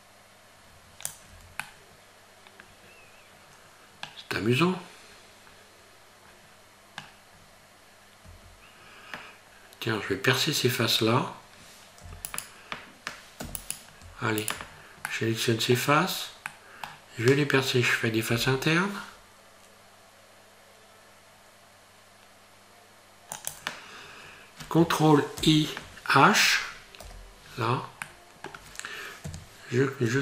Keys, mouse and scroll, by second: 1.3 Tab, 1.6 middle click, 4.4 middle click, 7.4 scroll up 3, 8.3 Tab, 12.0 z, 13.4 3, 13.6 right click, 14.4 shift+right click, 14.7-15.1 scroll down 3, 15.1 middle click, 16.0-16.3 scroll up 1, 16.5 middle click, 18.3 i, 25.4 ctrl+i, 27.0 h, 28.1 middle click, 29.2 KP_Decimal.